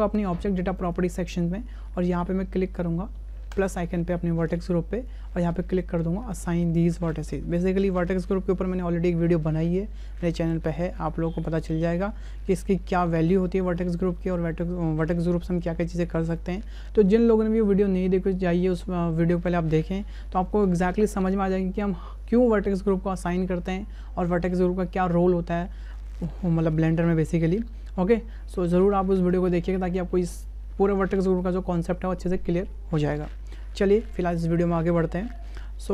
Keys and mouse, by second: 0.8 click, 3.5 click, 6.4-35.9 drag.